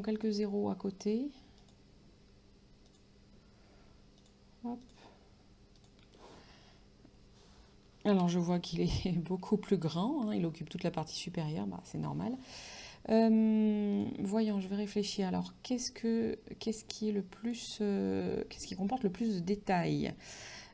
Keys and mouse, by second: 1.7 click, 2.9 click, 4.3 click, 8.3 ctrl+), 14.0 click.